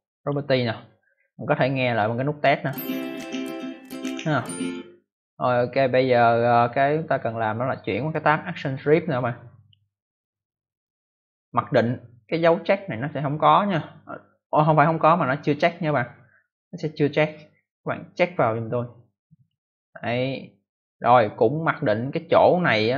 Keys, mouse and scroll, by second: 0.1 click, 2.2 click, 4.5 click, 9.5 click, 15.6 click, 19.3 click.